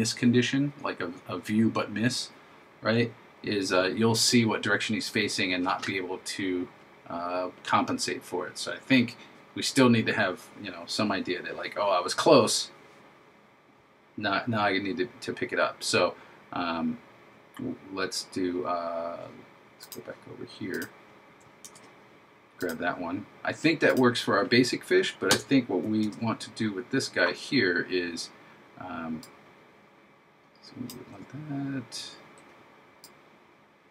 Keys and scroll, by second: 21.7 super+c, 26.1 super+v.